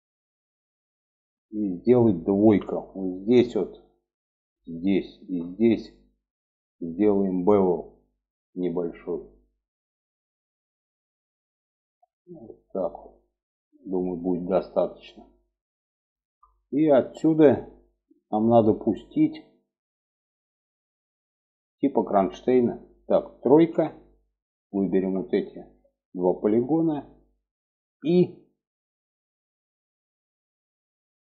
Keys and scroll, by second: 1.8 2, 23.1 3, 27.9 i.